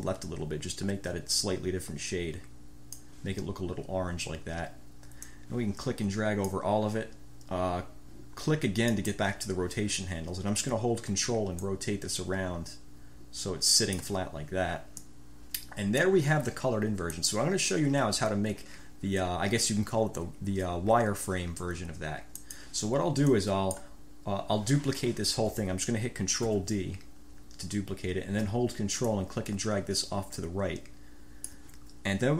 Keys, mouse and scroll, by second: 5.5-6.9 drag, 9.1 click, 11.7 ctrl+click, 12.5-13.5 ctrl+scroll up 1, 13.5-14.3 ctrl+scroll up 1, 15.2-16.4 drag, 17.3 click, 22.6 click, 23.5 click, 26.6 ctrl+d, 29.2 ctrl+click, 29.3-30.3 ctrl+scroll up 1, 30.3-31.5 ctrl+scroll up 1, 30.3 ctrl+click, 31.5 ctrl+click.